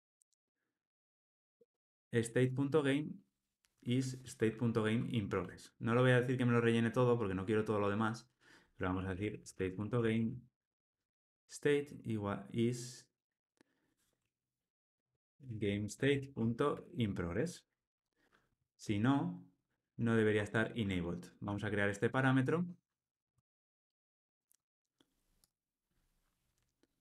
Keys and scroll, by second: 11.3 Tab, 17.3 Return, 18.4 Escape.